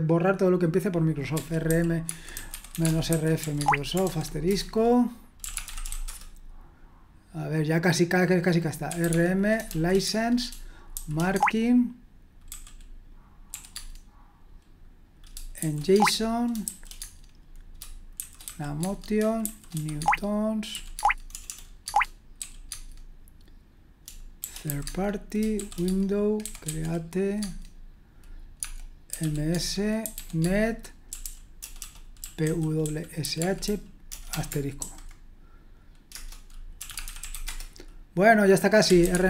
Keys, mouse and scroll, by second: 1.3-6.6 typing, 8.6-9.7 typing, 10.7-11.4 typing, 12.5-13.7 typing, 15.6 typing, 15.9 Tab, 16.7 j, 17.0 Tab, 18.2-23.1 typing, 18.8 Tab, 24.4-27.2 typing, 24.8 Tab, 27.4 Tab, 28.6-34.8 typing, 36.1 Return, 36.5-39.2 typing.